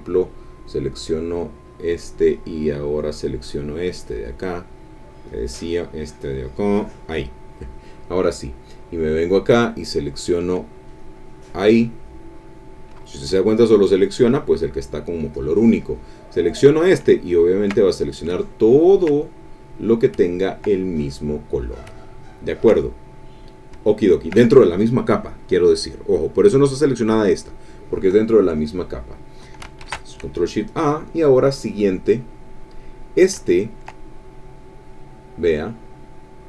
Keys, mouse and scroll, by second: 0.6 click, 1.9 click, 3.0 click, 3.8 click, 5.3 click, 6.0-7.4 drag, 9.2 click, 10.8 click, 15.3 click, 17.1 ctrl+middle click, 17.1 ctrl+scroll up 1, 17.3 ctrl+click, 18.3 ctrl+click, 20.9 ctrl+click, 22.0 ctrl+click, 23.0 ctrl+click, 23.8 ctrl+click, 29.8 ctrl+shift+a, 32.0 click, 32.9-34.0 middle drag, 34.7 click, 35.6-36.4 drag.